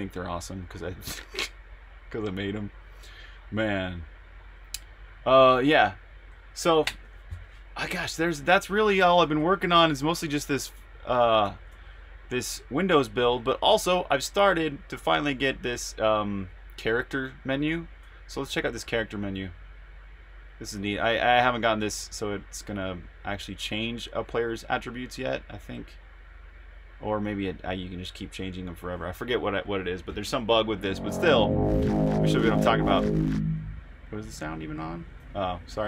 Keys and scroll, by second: 9.5 super+Tab, 11.4 super+r, 11.4-12.5 typing, 21.1-22.4 typing, 35.7-35.8 typing.